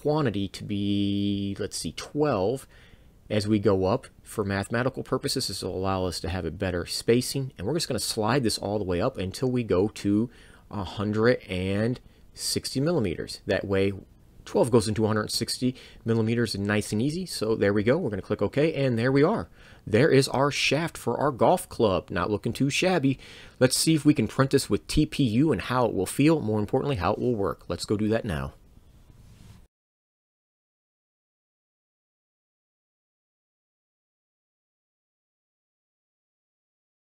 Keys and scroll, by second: 0.7 ctrl+1, 0.9 2, 2.6 2, 10.9 1, 11.3 6, 11.6 0, 17.6 Return, 17.7 Return.